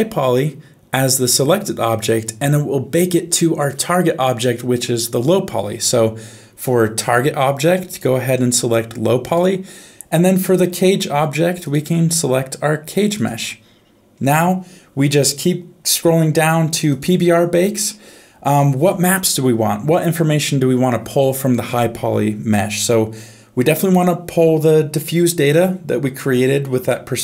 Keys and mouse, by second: 7.9 click, 11.6 click, 16.9 click.